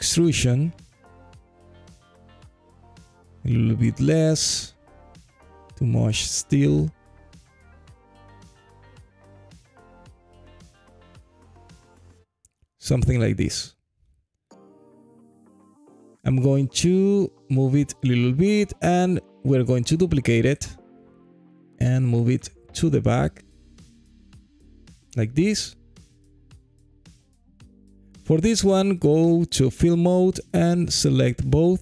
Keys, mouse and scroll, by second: 0.8-3.3 drag, 2.2 KP_0, 4.4 click, 5.5-8.5 drag, 7.0 Left, 7.2 Left, 9.7-12.2 drag, 13.4-14.3 alt+drag, 14.5 alt+middle click, 15.9 g, 16.1 y, 17.1 click, 19.0 shift+d, 19.5 right click, 20.4 g, 20.9 y, 24.8 click, 25.3-27.6 alt+drag, 29.0-30.7 drag.